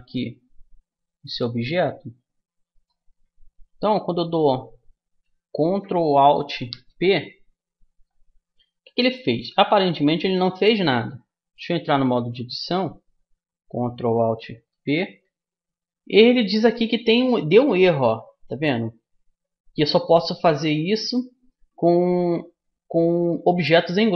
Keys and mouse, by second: 1.3-4.4 drag, 2.8-4.5 right drag, 10.5-12.4 middle drag, 11.8 Tab.